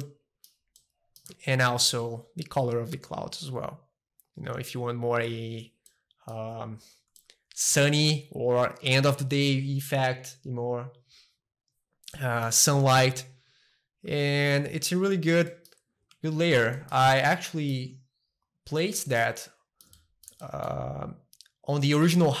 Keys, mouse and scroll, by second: 0.0-2.0 middle drag, 2.0-3.7 drag, 5.9-7.1 middle drag, 7.2-9.2 shift+middle drag, 12.1-13.7 middle drag, 13.7-15.9 drag, 15.9 middle click, 16.2 a, 16.4 middle click, 17.1-19.1 shift+middle drag, 18.4 click, 19.2-20.3 shift+middle drag, 20.4-22.4 shift+middle drag.